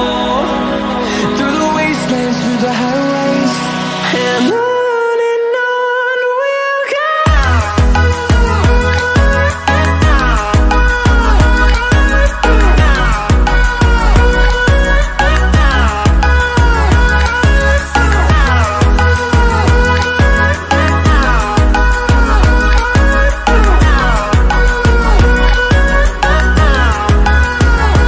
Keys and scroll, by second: 0.4 ctrl+d, 1.6 ctrl+d, 3.5 ctrl+d, 4.6 ctrl+d.